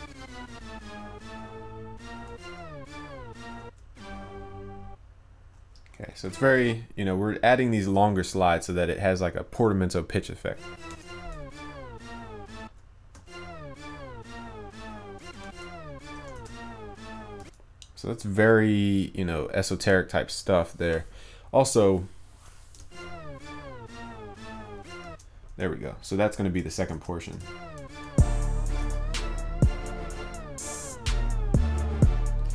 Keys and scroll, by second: 27.0 ctrl+s, 29.3 ctrl+s.